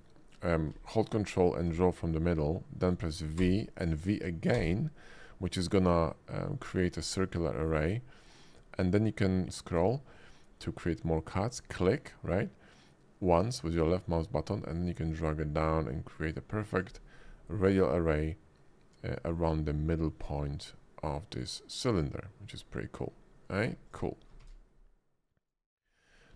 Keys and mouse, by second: 1.7-2.7 drag, 3.4 v, 4.5 v, 9.0 v, 11.5 click, 14.7 click, 16.7-17.5 drag, 17.5-19.1 middle drag, 20.5-22.5 middle drag, 23.5 x, 24.4 shift+a, 26.1 click.